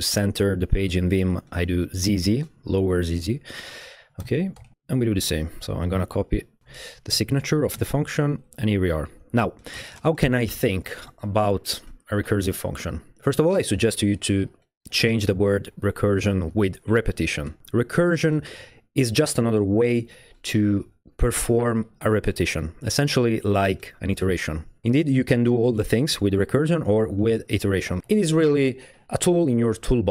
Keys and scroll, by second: 2.1 typing, 4.2 o, 4.6 BackSpace, 4.7 BackSpace, 6.6 super+c, 6.6 super+v, 7.8 Return, 8.0 shift+è, 8.2 Return, 8.5 Return, 8.9 Up, 9.1 Up, 9.8 Tab.